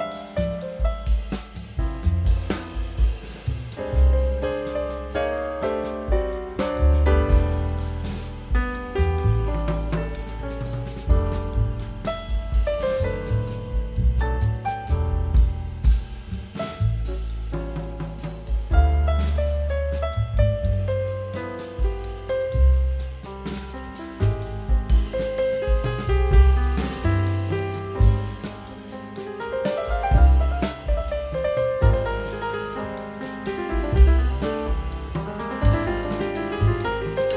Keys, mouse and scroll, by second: 0.9 typing, 5.6 scroll up 1, 6.2-6.6 typing, 8.6 right click, 13.8 scroll down 1, 14.1 scroll up 1, 15.9 right click, 16.5-17.7 scroll down 1, 19.8 scroll up 1, 20.8 double click, 21.2 scroll down 1, 22.8 scroll up 1, 24.7 scroll down 1, 26.0 scroll down 1, 27.4 scroll down 1, 27.5 scroll up 1, 31.7 scroll down 1, 32.2 scroll up 1.